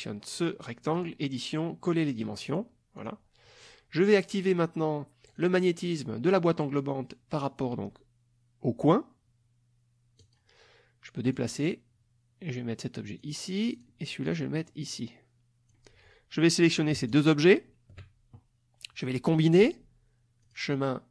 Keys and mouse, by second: 0.9 click, 2.5 click, 2.9 click, 3.6 click, 5.3 click, 10.2 click, 11.3-13.4 drag, 13.7 click, 14.3-15.9 drag, 17.1 shift+click, 20.4 click.